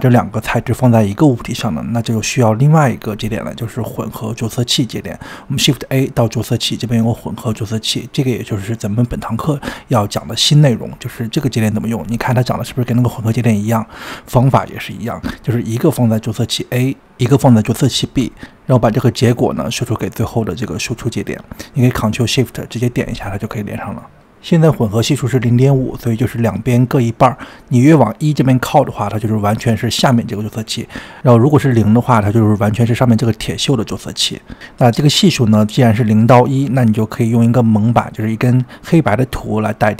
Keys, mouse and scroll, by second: 1.6-2.3 scroll down 3, 2.3-3.3 shift+middle drag, 3.3 click, 4.3 click, 5.3 shift+a, 8.8-10.2 scroll up 12, 10.2 click, 10.8-12.2 scroll up 2, 12.2-12.7 scroll down 5, 14.7 drag, 17.0 click, 19.3 drag, 21.5 ctrl+shift+click, 22.7 click, 25.6-26.1 scroll up 4, 26.6-29.7 drag, 30.0-33.0 drag, 36.6-37.4 scroll down 8, 37.4 click, 38.2 shift+a.